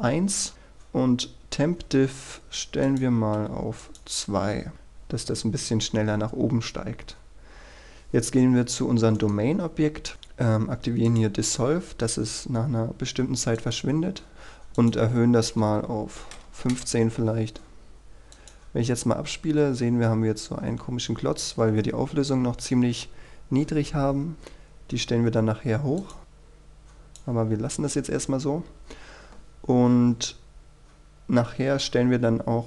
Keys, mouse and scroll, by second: 3.5 KP_2, 3.9 click, 9.3 right click, 11.2 click, 15.8 KP_1, 16.8 Return, 18.5-19.6 drag, 21.0-23.3 scroll down 1, 26.2 click, 27.7-30.3 scroll up 1, 31.6-32.6 scroll down 1.